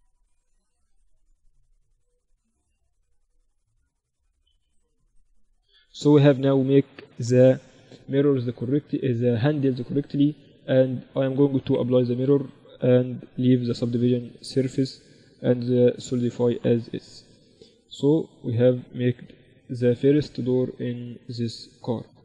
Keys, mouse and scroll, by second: 0.5 Tab, 1.3-3.1 drag, 2.8 Tab, 3.8-5.3 drag, 4.7 z, 5.3-8.7 middle drag, 5.3 z, 11.0-17.5 drag, 17.5 middle click, 18.2-22.2 right drag.